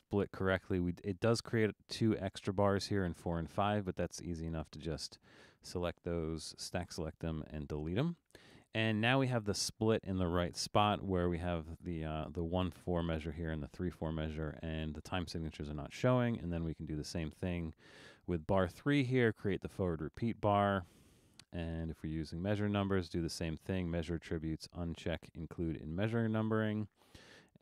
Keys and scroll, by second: 7.1 BackSpace.